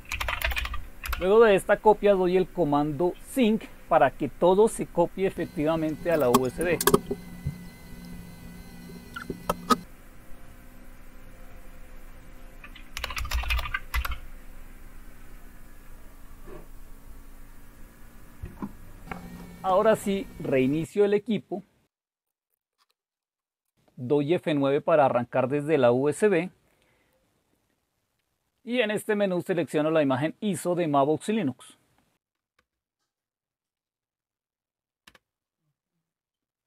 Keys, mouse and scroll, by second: 0.0-1.0 typing, 12.7-13.9 typing, 14.0 Return.